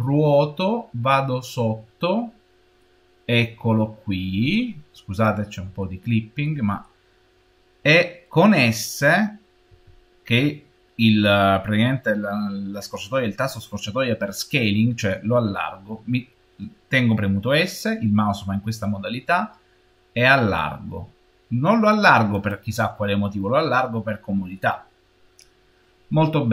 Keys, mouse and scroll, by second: 3.2-4.3 scroll up 5, 4.3-5.7 scroll down 2, 5.7-8.7 shift+middle drag, 9.6 s, 22.8-25.8 middle drag.